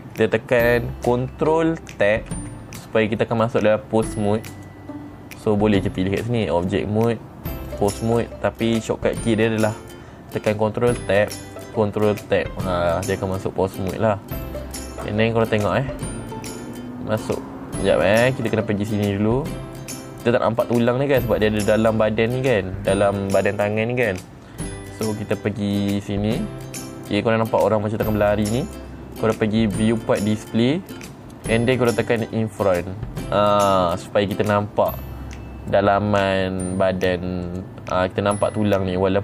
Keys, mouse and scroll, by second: 0.2 middle click, 2.9 ctrl+Tab, 5.1 click, 6.4 click, 7.1 click, 8.2 click, 11.5 ctrl+Tab, 12.6 ctrl+Tab, 14.4 middle click, 16.2 click, 21.1 middle click, 26.4 click, 30.4 click, 31.4 middle click, 31.4-32.7 scroll down 4, 33.2 click, 35.5 middle click, 38.0 click.